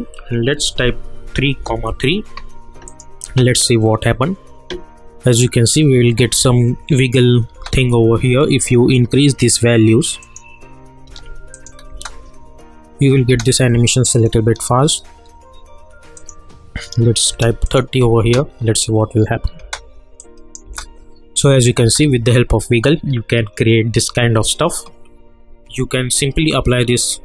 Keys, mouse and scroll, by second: 0.9-2.2 typing, 2.9 click, 3.2 space, 7.5 space, 8.6 click, 11.9 space, 14.1 click, 18.2 space, 20.2 click, 20.6 space.